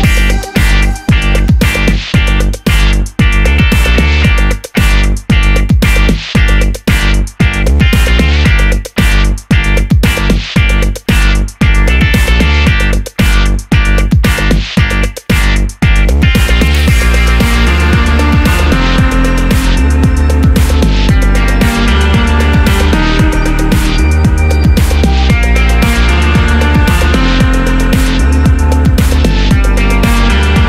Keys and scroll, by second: 12.5 super+c, 12.6 super+v, 13.6 d, 15.8-17.5 typing, 15.8 Return, 19.7-20.9 typing.